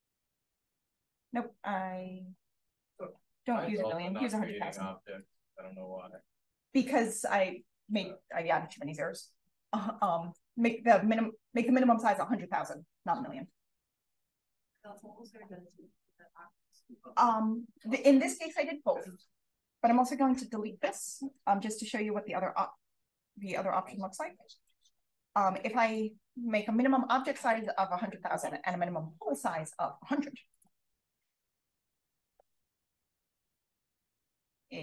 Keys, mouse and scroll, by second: 0.0-0.7 drag, 2.2 click, 3.0 click, 3.8 click, 4.4 BackSpace, 5.1 click, 5.4 BackSpace, 6.1 click, 7.6 click, 10.0 click, 19.4 click, 19.6 click, 21.9 click, 24.5 click, 25.5 click, 27.8 1, 28.2 0, 30.4 click, 31.5-32.2 scroll up 1, 32.2 click, 32.8 click, 33.6 shift+f.